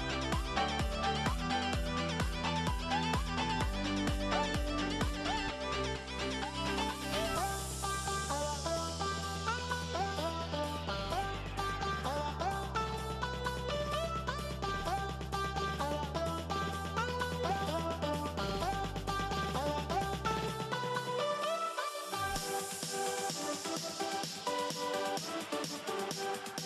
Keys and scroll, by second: 5.1 -, 7.9 -, 8.2 -, 9.1 -.